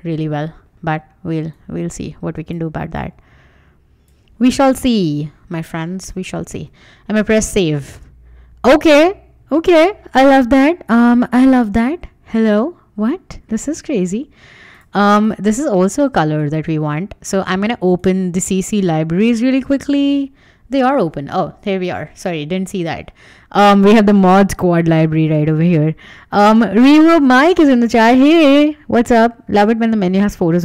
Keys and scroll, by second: 4.6 Return, 6.5 super+s, 13.5 super+Tab, 16.5 super+Tab.